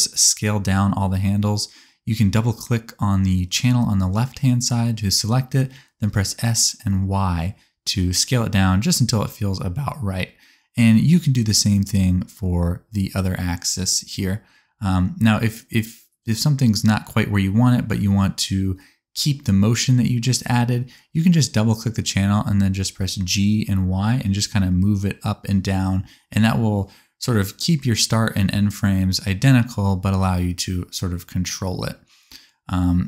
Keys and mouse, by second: 1.8 s, 15.7 click, 15.8-17.4 middle drag, 16.5 r, 19.2 click, 19.7 r, 25.2 click, 25.4 click, 26.0 g.